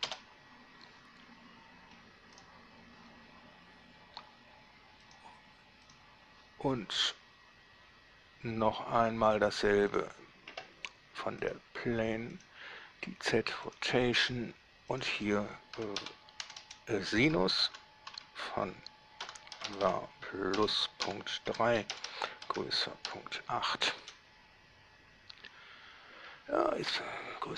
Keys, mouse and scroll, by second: 0.3 Return, 1.8 scroll down 2, 2.6 right click, 5.3 click, 6.1 click, 10.1 click, 11.7 click, 12.6 click, 13.9 click, 15.1 click, 16.0-18.3 typing, 19.4 8, 19.7 v, 19.9 a, 20.1 r, 21.3-24.3 typing.